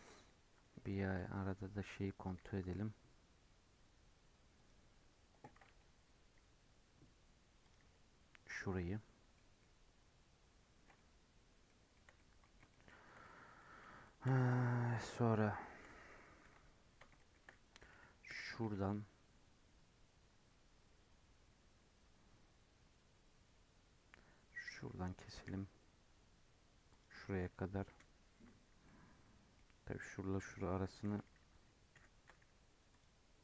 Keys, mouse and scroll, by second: 8.7-12.0 middle drag, 12.0 scroll up 1, 12.1-13.1 middle drag, 13.1 scroll down 1, 13.2-13.7 middle drag, 13.7-14.0 scroll up 2, 14.0-14.4 shift+middle drag, 14.4 scroll down 1, 14.4 Tab, 14.5 middle click, 14.8-15.6 scroll up 2, 15.6 shift+middle click, 16.4 KP_7, 17.1-18.2 shift+middle drag, 18.2 k, 28.8-30.5 middle drag, 30.5 click, 31.9 k.